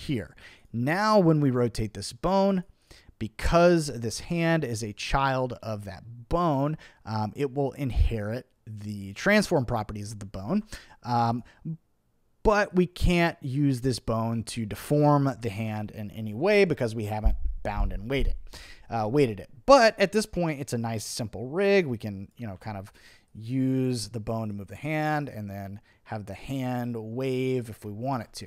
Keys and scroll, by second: 10.4 super+z, 15.6 super+z, 16.3 super+z, 22.6 super+z, 28.1 super+z.